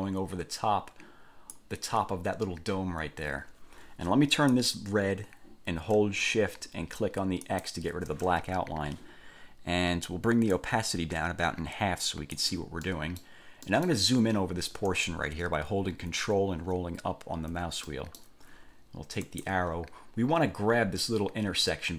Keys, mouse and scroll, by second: 4.7 click, 7.6 shift+click, 10.7-12.7 drag, 13.0 middle click, 13.8 middle click, 16.5-17.1 ctrl+scroll up 2, 17.3 ctrl+scroll up 2, 18.1 ctrl+middle click, 19.5 click.